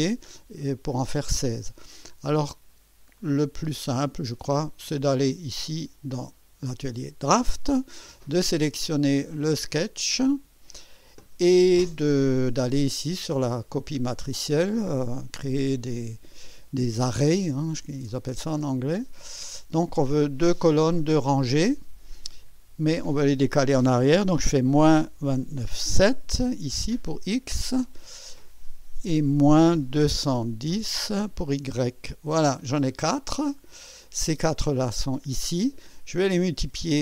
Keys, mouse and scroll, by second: 3.2 click, 4.6 click, 9.2 click, 18.1 click, 22.4 click, 24.7 KP_Subtract, 25.3 KP_2, 25.6 KP_9, 26.0 KP_7, 28.0 click, 29.6 KP_Subtract, 30.0 KP_2, 30.3 KP_1, 30.7 0, 31.7 Return, 33.1 scroll down 2.